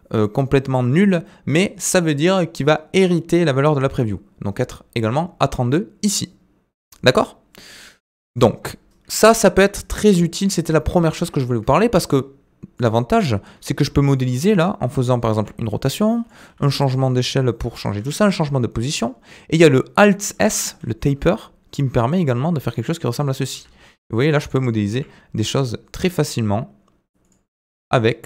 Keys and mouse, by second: 9.1-11.6 middle drag, 11.6 Tab, 12.7 click, 13.6 middle click, 14.1 click, 15.3 r, 16.5 s, 18.1 g, 20.1 middle click, 20.7 alt+s, 23.5 r, 24.9 g, 27.5 middle click.